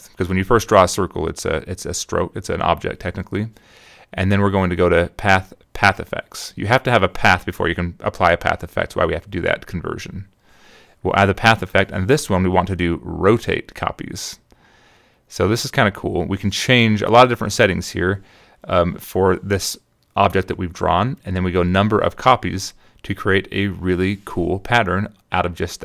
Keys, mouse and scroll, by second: 2.8 click, 4.9 click, 10.2 click, 16.0 click, 21.6 click, 22.0 click, 22.4 click, 22.8 click, 23.2 click, 23.7 click, 23.9 click, 24.2 click, 24.6 click, 24.9 click.